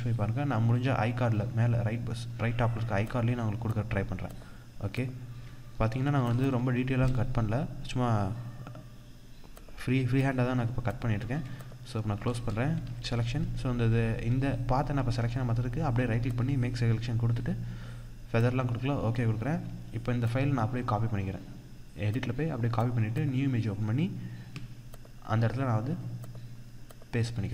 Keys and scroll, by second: 5.8 ctrl+-, 6.0 ctrl+space, 12.7 ctrl+-.